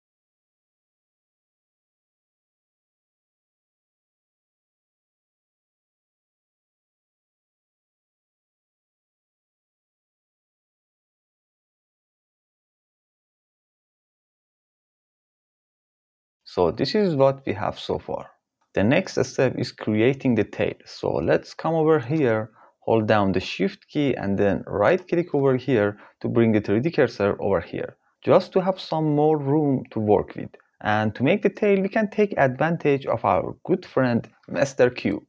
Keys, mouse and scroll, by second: 0.1 m, 4.5 Return, 7.2 shift+s, 8.8 click, 9.5 shift+s, 18.6 shift+KP_Decimal, 24.3 shift+click, 25.2 drag, 33.3 shift+a.